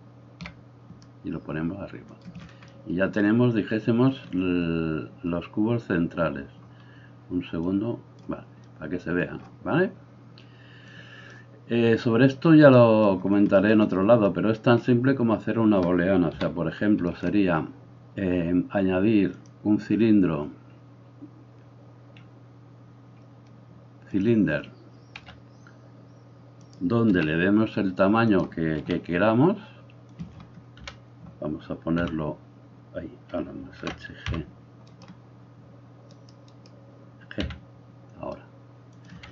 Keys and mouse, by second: 7.7-26.7 drag, 16.4 KP_7, 25.1 s, 26.7-36.1 middle drag, 27.1 s, 28.8 s, 30.9 KP_1, 32.0 h, 33.9 alt+h, 34.3 g, 36.1 right click, 36.4-39.3 middle drag.